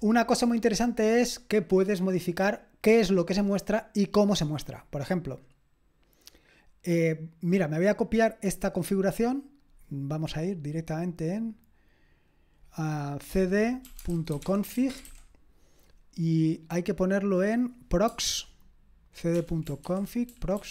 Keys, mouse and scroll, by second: 4.4-5.3 scroll down 1, 5.3-6.5 scroll down 1, 6.5-8.8 scroll down 1, 8.8 scroll down 1, 8.9 click, 9.6-13.8 drag, 13.6-15.5 typing, 19.3-20.7 typing.